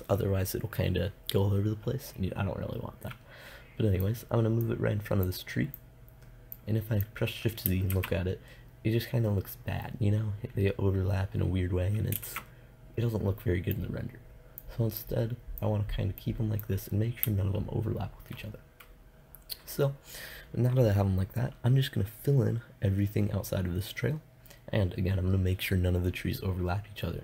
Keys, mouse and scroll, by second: 4.4-5.8 drag, 8.1 shift+z, 12.3 shift+z, 13.9 middle click, 16.6-18.2 drag.